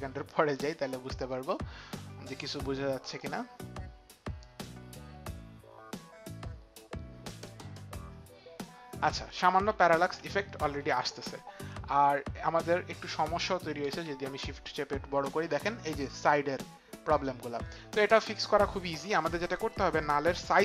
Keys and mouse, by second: 3.3 click, 10.5 ctrl+z.